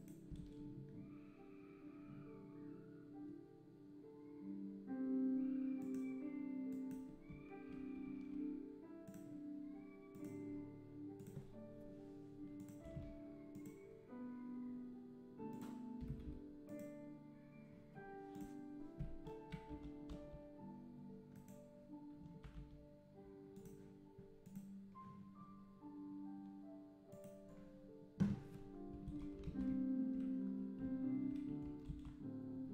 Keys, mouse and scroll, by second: 0.0 shift+right click, 0.4 shift+a, 7.3 `, 8.0 g, 11.2 click, 13.5 click, 16.7 KP_0, 18.5 click, 19.7 s, 22.2 s, 24.6 click, 27.1 click, 29.5 alt+a.